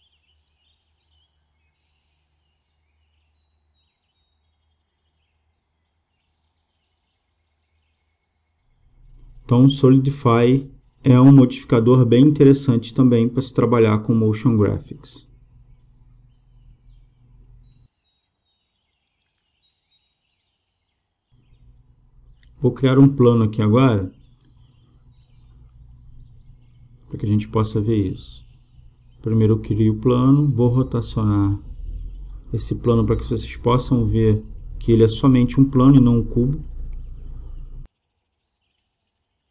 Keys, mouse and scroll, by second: 1.2-3.0 drag, 12.9-14.8 drag, 23.2-24.9 drag, 23.8 space, 34.4-36.2 drag, 35.7 r.